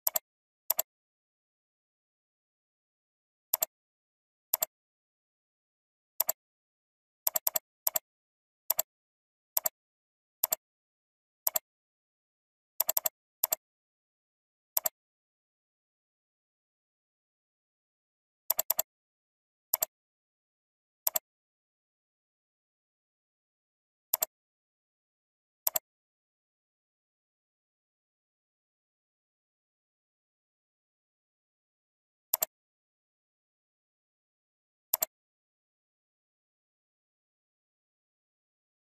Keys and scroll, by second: 13.0 ctrl+space, 18.7 alt+space, 23.4 F9, 25.1 ctrl+g.